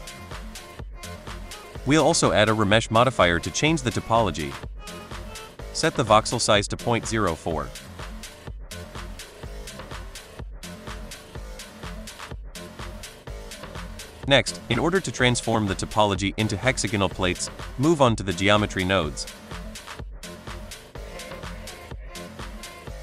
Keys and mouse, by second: 0.0 shift+middle drag, 1.3-4.0 drag, 5.8-10.0 drag, 14.3 click, 16.4 shift+middle click, 20.2 click, 22.4 click.